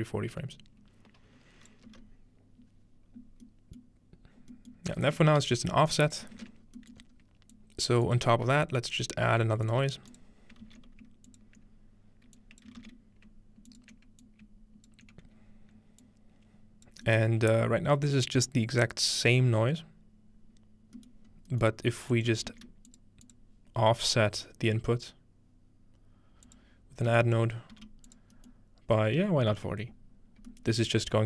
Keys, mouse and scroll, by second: 4.1-4.5 middle drag, 4.7-6.2 middle drag, 5.9-21.0 drag, 6.6-7.0 ctrl+scroll down 1, 7.0-8.2 ctrl+scroll up 1, 8.5 scroll down 1, 9.3 g, 10.7 shift+d, 12.8 shift+d, 21.3-22.2 scroll up 3, 21.5 middle click, 21.7-23.9 middle drag, 22.2-25.2 shift+drag, 22.5 shift+d, 26.5 click, 27.7 g, 28.1 click, 30.7-31.2 middle drag, 30.9-31.2 scroll down 2.